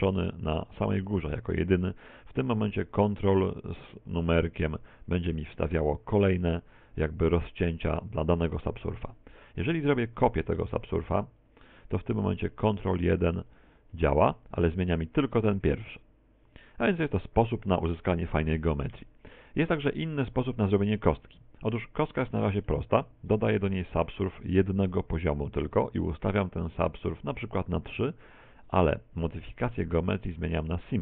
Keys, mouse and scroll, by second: 2.6 ctrl+1, 3.4 ctrl+2, 3.8 ctrl+3, 4.2 ctrl+4, 4.5 ctrl+5, 5.1 ctrl+6, 6.0 ctrl+4, 6.4 ctrl+3, 6.8 ctrl+2, 7.3 ctrl+1, 7.6 ctrl+2, 8.0 ctrl+1, 8.4 ctrl+2, 10.6 ctrl+1, 11.4 click, 12.6 ctrl+1, 13.0 ctrl+2, 13.4 ctrl+3, 13.8 ctrl+4, 14.3 ctrl+3, 19.9 click, 20.2 click, 21.4 Tab, 21.9 middle click, 22.8 Tab, 23.6 ctrl+1, 26.6 click, 27.1 click, 30.6 click.